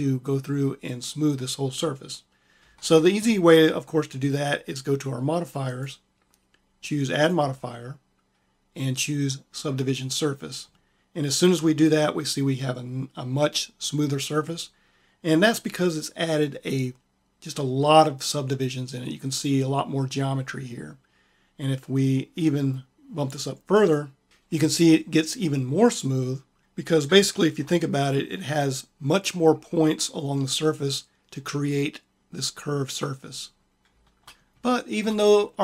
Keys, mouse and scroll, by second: 2.5 Tab, 5.5 click, 6.1-8.6 drag, 23.8 click, 26.6-31.4 middle drag, 33.4-34.8 middle drag.